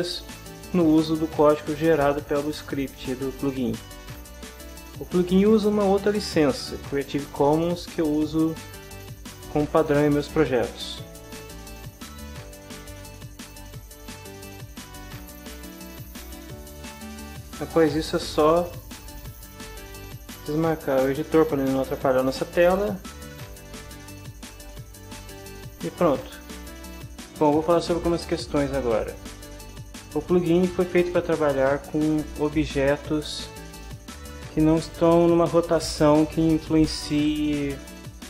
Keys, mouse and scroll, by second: 3.8-5.2 scroll down 2, 12.2 click, 15.6 click, 18.5 click, 19.3 click, 22.6 click, 23.4 click, 25.7-26.9 drag.